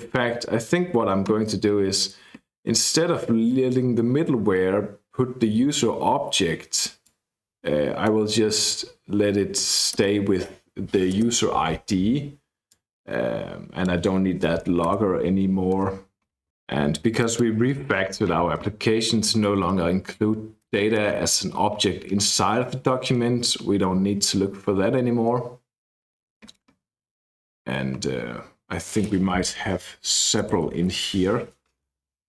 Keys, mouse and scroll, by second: 2.5-4.3 scroll up 2, 7.0-8.3 drag, 9.9 BackSpace, 11.2 space, 12.6-14.1 drag, 14.8 BackSpace, 15.7 BackSpace, 17.1 click, 20.7 BackSpace, 21.0 BackSpace, 24.9-26.6 scroll up 1, 27.2-28.0 scroll up 1, 28.4-29.1 scroll up 1, 29.6 ctrl+f, 29.8-31.3 typing.